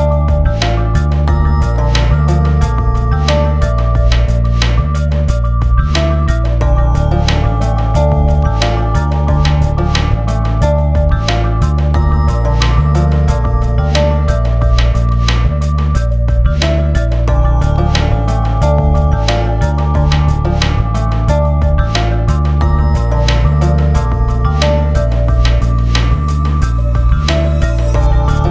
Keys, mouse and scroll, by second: 0.1 scroll down 1, 0.6 scroll up 1, 0.8 click, 0.9-2.5 typing, 2.0 scroll down 1, 2.3 scroll up 1, 2.6 Return, 3.1-4.6 scroll down 4, 3.8 click, 4.4 click, 5.0 scroll down 1, 5.4 click, 5.7 scroll down 1, 5.8 scroll up 1, 6.0 scroll down 1, 6.2 click, 6.9 scroll down 1, 7.4 click, 8.5 scroll down 1, 8.8 click, 9.3 click, 9.6 typing, 9.8 click, 9.8 scroll down 1, 10.5 scroll down 1, 10.8 click, 11.0 scroll down 1, 11.5 click, 12.2 scroll up 1, 12.3 click, 12.7 scroll down 1, 13.1 click, 13.5 scroll up 1, 13.8 click, 14.6 right click, 14.7 click, 15.4 right click, 15.5 click, 15.6 Return, 15.7 click, 15.9 F4, 16.1 click, 16.4 F4, 16.5 click, 16.9 scroll up 1, 17.4 click, 17.6 scroll down 1, 17.9 click, 18.7 click, 18.7 typing, 20.5 right click, 20.6 click, 21.1 click, 21.2 Return, 21.3-24.2 drag, 24.2 alt+Num_Lock, 24.3 Return, 25.0 click, 25.2-26.0 scroll down 3, 25.3 click, 25.6 click, 26.0 click, 26.4-26.9 scroll down 2, 27.2 click, 27.6 scroll down 1, 28.1 click, 28.2-28.5 scroll down 3.